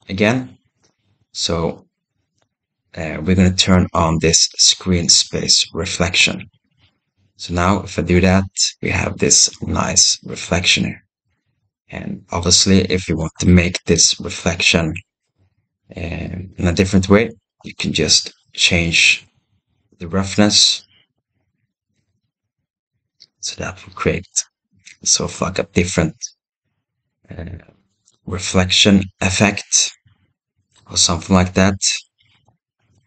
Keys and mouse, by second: 6.1 click, 13.3-13.8 shift+middle drag, 17.7-21.0 drag, 22.1-24.2 drag, 27.6-32.4 right drag, 32.9 right click.